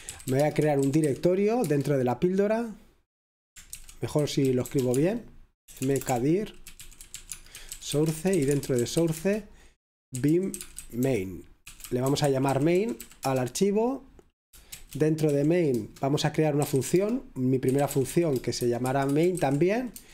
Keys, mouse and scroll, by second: 0.0-1.6 typing, 4.0-13.5 typing, 15.5-20.1 typing, 20.0 Return.